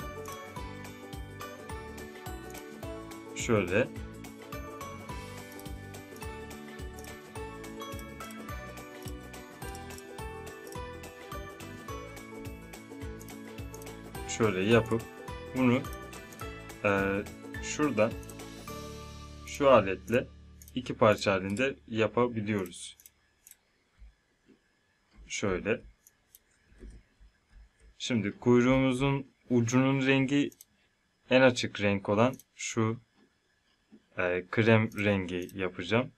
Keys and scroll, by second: 26.8 z.